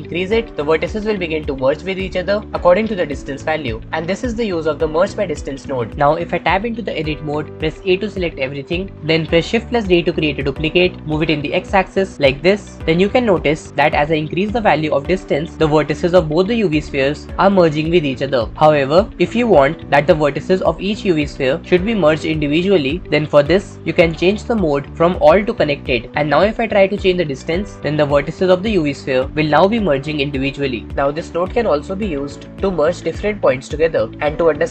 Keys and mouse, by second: 7.2 Tab, 8.4 a, 10.1 shift+d, 11.1 x, 12.8 Tab, 14.5-23.0 shift+right drag, 24.8-26.1 drag, 26.4-27.8 drag, 27.8-30.1 shift+middle drag, 30.1 shift+click.